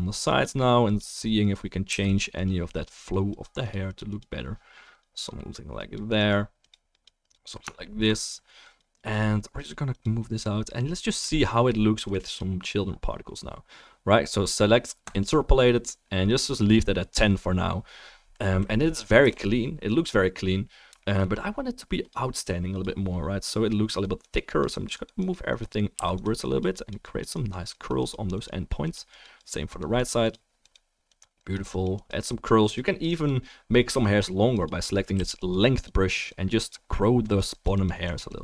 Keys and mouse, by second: 1.9 f, 2.1 drag, 7.3-7.8 alt+drag, 7.3-7.8 alt+middle drag, 7.3-7.8 alt+right drag, 10.5-11.3 middle drag, 15.3-19.4 drag, 19.2 KP_0, 19.4-22.0 middle drag, 26.0 f, 26.2 click, 35.2 f, 35.5-35.8 drag.